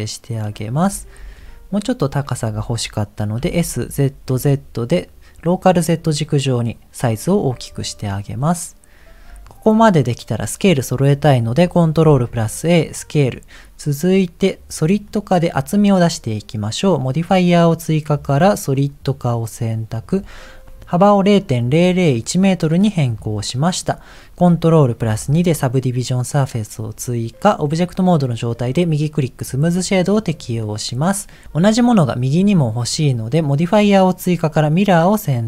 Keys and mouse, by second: 1.4 g, 3.4 s, 12.0 ctrl+a, 15.3 middle click, 18.8 click, 20.1 click, 23.6 middle click, 24.9 ctrl+2, 26.5 middle click, 30.3 click, 31.0 middle click, 31.9 click.